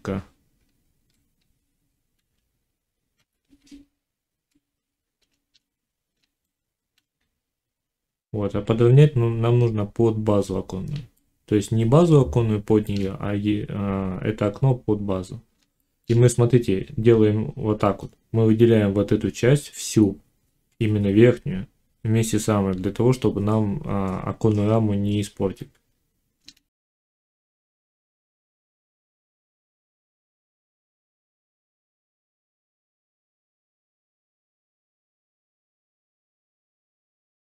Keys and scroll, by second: 0.4 Tab, 2.0 1, 27.0 g, 32.5 g, 34.2 1, 34.7 g, 35.5 z, 36.7 g.